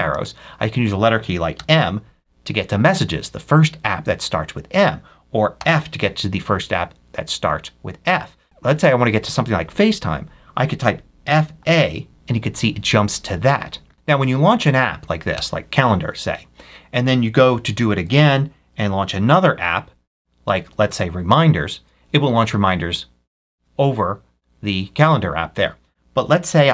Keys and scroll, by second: 0.0 Left, 1.4 m, 5.5 f, 11.1 f, 11.5 a, 14.0 Right, 15.2 Return, 19.0 ctrl+F3, 20.4 Right, 22.3 Return.